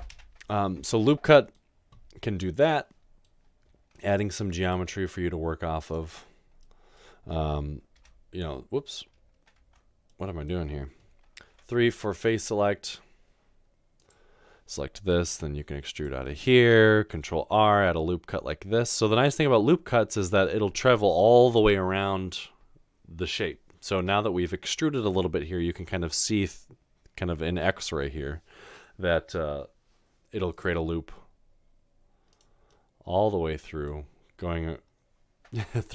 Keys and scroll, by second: 0.2 ctrl+z, 4.0 ctrl+r, 8.0 Tab, 9.6 Tab, 11.5 Tab, 15.3 e, 16.0 e, 17.2 ctrl+r.